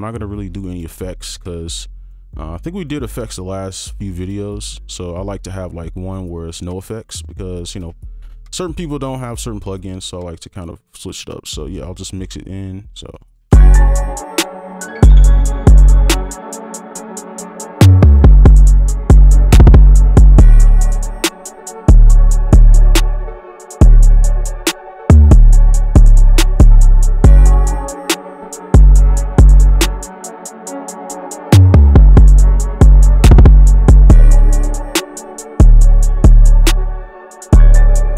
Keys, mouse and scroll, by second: 13.2 double click, 21.3 double click, 33.7 double click.